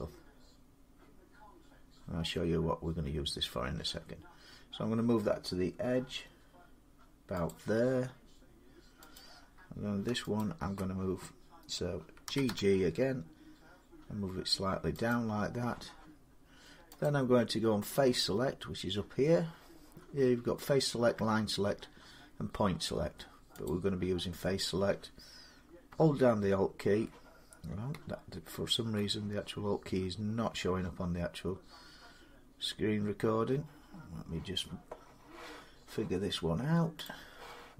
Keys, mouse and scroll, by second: 7.3 click, 9.0 click, 10.3 alt+click, 12.1 typing, 14.9 click, 16.9 click, 23.5-33.9 drag, 36.9 click.